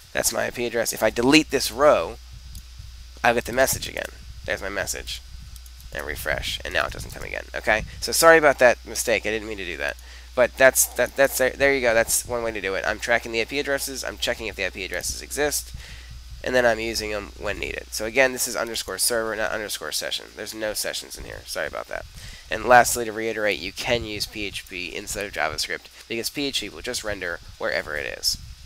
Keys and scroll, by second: 4.0 super+r, 11.2 super+r.